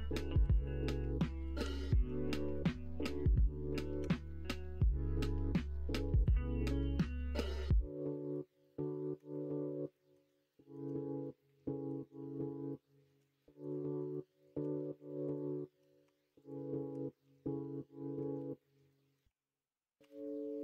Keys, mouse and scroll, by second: 0.4 KP_2, 1.6 KP_3, 4.0 g, 7.3-9.1 middle drag, 9.9-10.7 scroll up 2, 11.3 middle click, 12.3-13.0 scroll up 1, 13.0 middle click, 13.3-14.0 shift+scroll up 2, 14.6 Tab, 15.6 Tab, 16.0 Tab, 16.9 Tab, 18.2 alt+z, 18.9 shift+middle click, 20.0 3, 20.5 middle click.